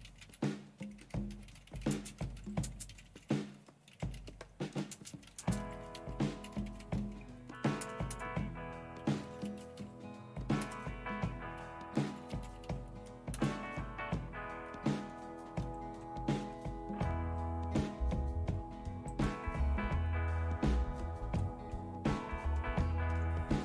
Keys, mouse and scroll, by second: 0.0-10.3 typing, 10.6 Return, 12.1-13.2 typing, 13.4 Return, 15.6 super+0.